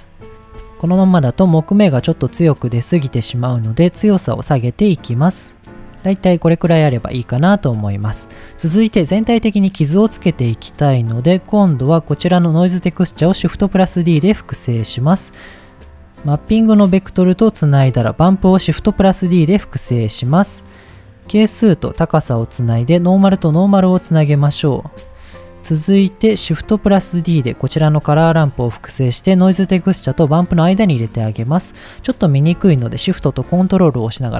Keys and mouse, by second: 0.3 shift+middle click, 2.8 middle click, 3.8-5.5 drag, 6.7 click, 10.8 middle click, 12.0 click, 13.4 shift+d, 14.4 click, 16.2-17.4 drag, 18.0 click, 18.7 shift+d, 19.3 click, 19.9 middle click, 21.3-22.3 drag, 22.8-23.4 drag, 24.7 click, 26.6 click, 27.4 middle click, 27.9 shift+d, 28.5 click, 29.6 click, 30.9 middle click, 31.5-31.9 middle drag.